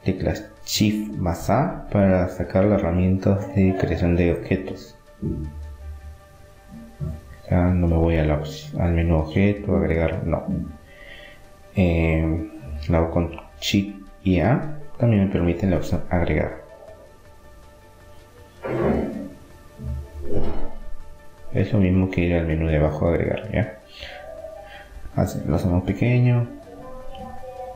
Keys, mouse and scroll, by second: 0.6-1.9 drag, 2.3 Tab, 3.9 s, 4.4-6.1 middle drag, 6.4-8.2 middle drag, 9.1 r, 11.6-14.3 middle drag, 13.6-15.5 drag, 15.5-17.2 middle drag, 17.2-19.2 drag, 19.6 s, 23.2-24.6 middle drag, 25.9 Tab, 26.5-27.6 middle drag, 27.6-27.7 drag.